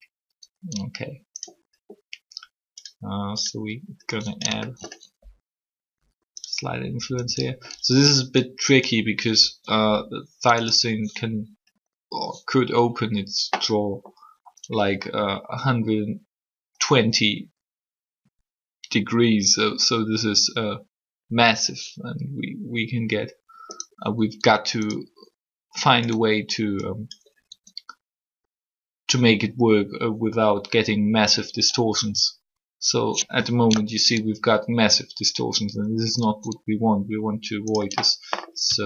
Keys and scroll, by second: 5.0 alt+shift+r, 9.4 r, 15.0 r, 24.3 r, 27.4 r.